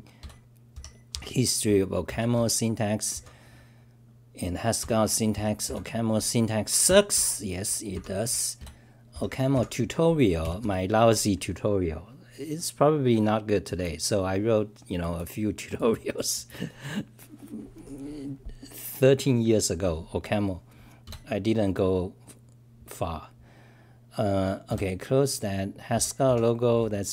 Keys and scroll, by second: 2.1 Return, 2.3 k, 6.9 Return, 7.1 k, 10.5 Return, 10.6 k.